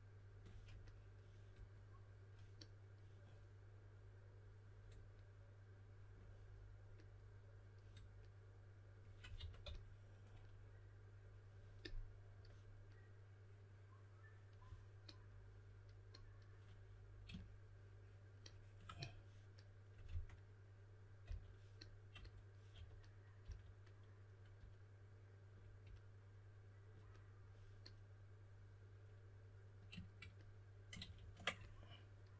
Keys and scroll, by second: 9.1-10.1 typing, 20.0 typing, 21.2 typing, 22.7-23.4 typing, 30.9 super+z, 31.1 super+z.